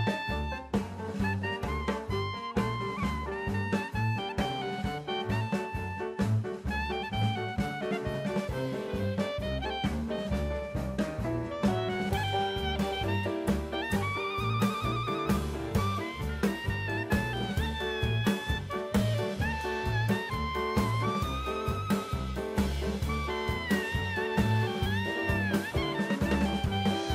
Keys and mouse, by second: 0.8 shift+middle click, 2.1 shift+middle click, 3.1 drag, 10.2 shift+a, 15.2 middle click, 17.1-19.5 drag, 20.7 drag, 22.4 shift+a.